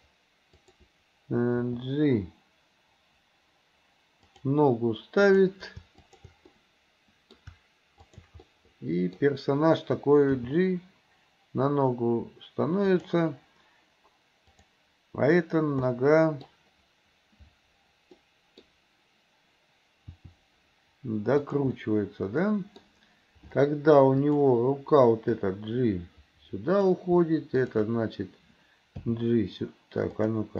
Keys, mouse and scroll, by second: 0.6 click, 1.7 g, 5.3 click, 6.0 shift+click, 6.5 middle click, 8.1 shift+click, 8.5 middle click, 10.4 g, 14.5 click, 16.0-16.5 middle drag, 18.3-18.7 middle drag, 20.2 r, 21.8-22.9 middle drag, 24.3 click, 25.3-27.0 drag, 27.6 shift+click, 29.1 g.